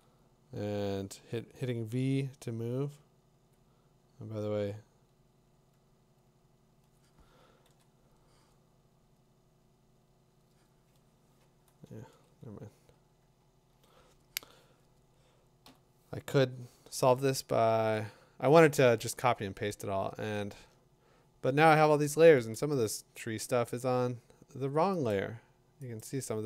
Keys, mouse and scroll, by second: 6.8 click, 7.6 ctrl+z, 10.3 click, 12.1 ctrl+z, 13.7 ctrl+d, 15.6 b, 17.9 Caps_Lock, 20.0 middle click, 20.0 middle click, 20.3 middle click, 20.4 middle click, 20.6 middle click, 21.5 middle click, 21.8 middle click, 22.2 middle click, 25.1 click, 26.0 click.